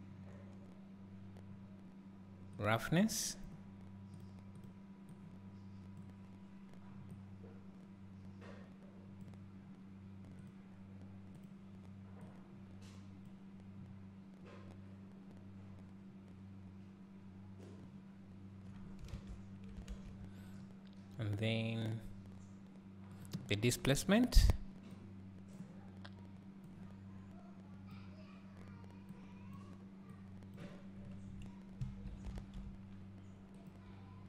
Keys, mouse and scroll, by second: 18.2-28.1 drag, 29.1 click, 30.1 click.